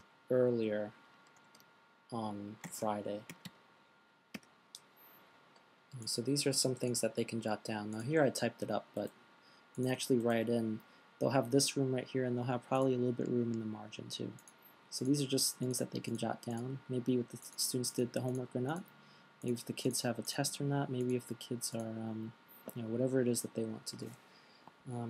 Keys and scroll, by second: 0.1 typing, 2.1-4.2 typing, 9.3 fn+Delete.